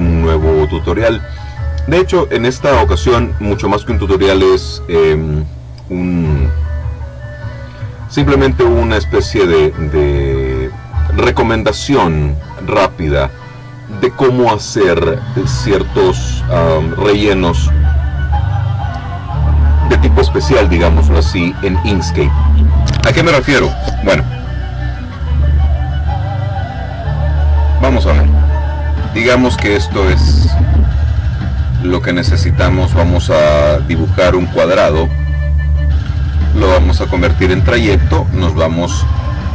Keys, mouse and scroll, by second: 28.0 click, 29.8-30.3 ctrl+scroll up 2, 31.6-33.4 drag.